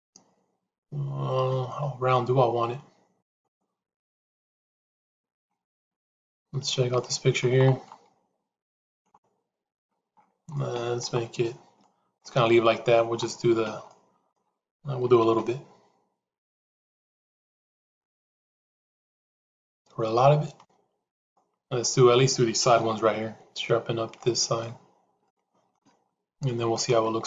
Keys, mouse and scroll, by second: 5.7 middle click, 6.8 shift+middle click, 10.4 middle click, 11.7 shift+middle click, 12.5 middle click, 13.7 shift+middle click, 15.1 shift+e, 21.7 middle click, 23.7 shift+z, 24.1 middle click, 25.2 shift+middle click, 26.4 middle click.